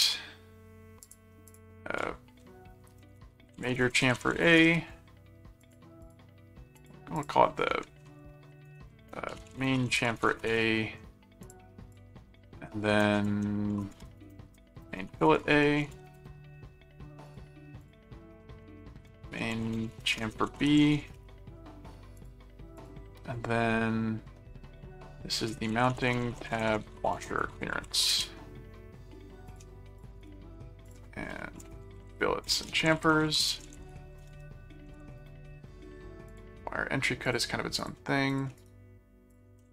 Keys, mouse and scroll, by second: 0.0-0.3 typing, 1.0 click, 2.9-4.8 typing, 5.6 click, 6.8 click, 9.1-10.6 typing, 11.4 click, 13.7-16.5 typing, 17.3 click, 17.8 click, 18.9-21.6 typing, 22.1 click, 22.8 click, 25.2-28.5 typing, 29.4 shift+click, 30.2 shift+right click, 30.9 click, 31.4-35.6 typing, 36.3 click, 37.2-38.8 drag, 38.6 shift+right click, 39.3 click.